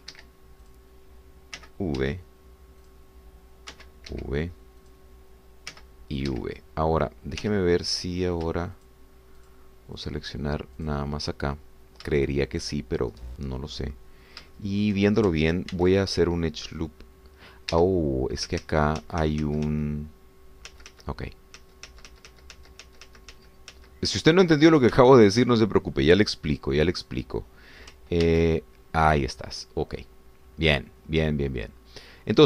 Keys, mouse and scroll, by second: 0.1 v, 1.2 Escape, 1.6 click, 2.6 v, 3.0 Escape, 3.8 click, 4.7 v, 5.1 Escape, 6.0 click, 6.8 v, 7.3 Escape, 8.4 2, 8.9 click, 9.9 shift+click, 10.4 shift+click, 11.0 shift+click, 11.9 shift+click, 12.6 shift+middle click, 14.8 middle click, 15.5 shift+middle click, 16.7 ctrl+r, 18.7 Escape, 19.6 ctrl+z, 21.8 ctrl+z, 27.6 click, 29.2 ctrl+r.